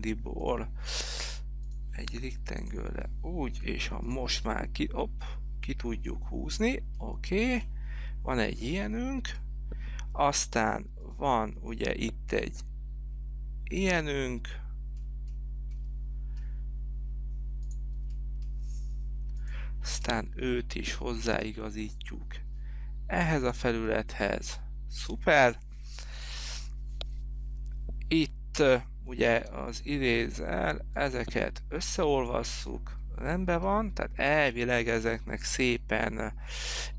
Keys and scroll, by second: 3.7 p, 24.6 space, 29.7 e.